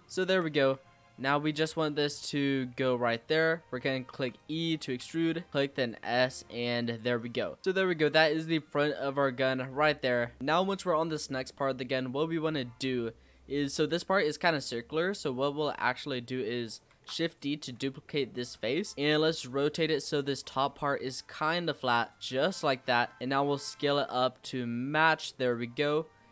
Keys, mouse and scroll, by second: 0.0 shift+middle click, 0.3-1.2 scroll down 9, 1.2 shift+middle click, 2.1 click, 3.3-4.1 scroll up 4, 4.1 e, 4.8 s, 6.0 e, 7.1 Tab, 7.2-7.8 scroll down 10, 8.3 click, 8.6-10.4 middle drag, 10.4 click, 12.1-12.6 scroll down 2, 12.6 scroll up 2, 13.1-14.3 scroll down 2, 14.3 click, 14.7-15.1 scroll up 3, 15.1 Tab, 15.3-16.9 middle drag, 16.9 shift+d, 17.6 s, 18.9-19.4 scroll up 6, 19.4 r, 22.4 click, 22.8-23.2 scroll down 5, 23.2 s, 25.6-26.0 scroll down 3, 26.0 shift+middle click.